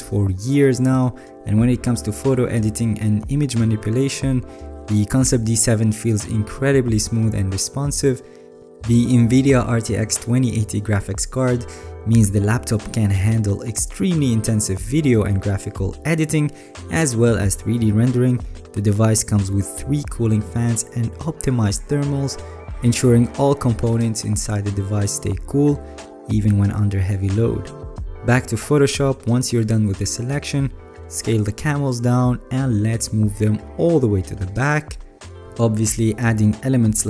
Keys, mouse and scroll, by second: 3.2 alt+scroll, 5.4 alt+scroll, 7.2 alt+scroll, 8.1 alt+scroll, 8.7-9.3 alt+scroll, 28.0 alt+right click, 29.6 alt+right click, 30.3 alt+scroll, 30.6 alt+right click, 31.5 ctrl+t.